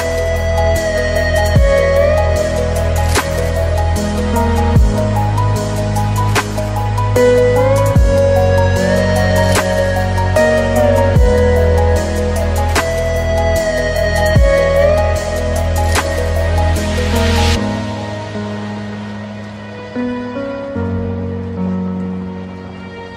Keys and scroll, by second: 0.2 ctrl+z, 14.1 ctrl+z, 22.7 ctrl+j.